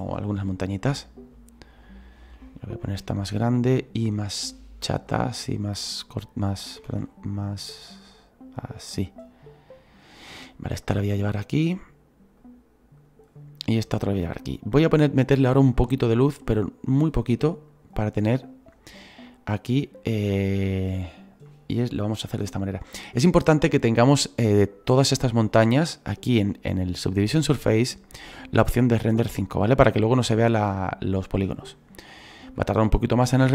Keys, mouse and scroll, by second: 2.9 s, 4.9-6.9 drag, 6.9 ctrl+z, 7.3-10.5 drag, 10.5-11.7 right drag, 11.7-13.9 drag, 13.9 right click, 14.6-16.4 drag, 16.4 s, 17.7-19.3 drag, 19.3-20.5 middle drag, 20.5 scroll down 4, 21.5-24.2 middle drag, 24.2-29.7 right drag, 30.3-33.5 right drag.